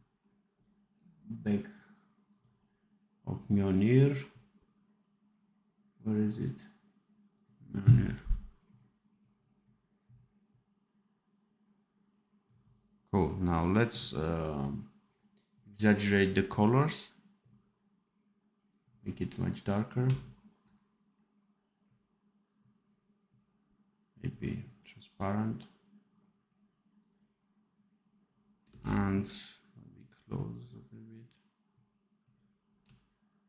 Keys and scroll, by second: 28.6 space.